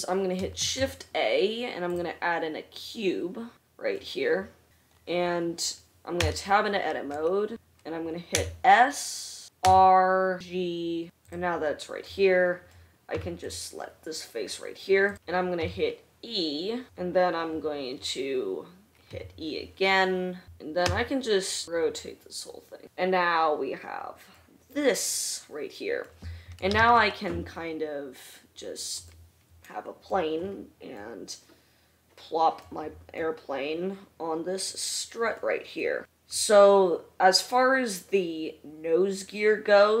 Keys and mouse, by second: 1.0 shift+a, 4.2-6.3 middle drag, 6.8 Tab, 7.7 1, 9.0 s, 10.4 r, 10.6 g, 13.7 3, 16.1 e, 19.7 e, 21.3 a, 22.2 r, 22.9 Tab, 27.1 shift+a, 34.1-40.0 middle drag.